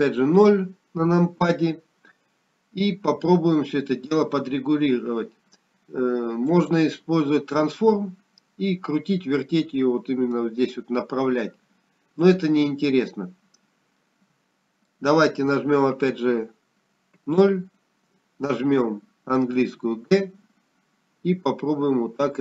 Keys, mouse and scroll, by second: 3.2 KP_0, 9.3 click, 18.4 middle click, 18.4-19.0 scroll down 1.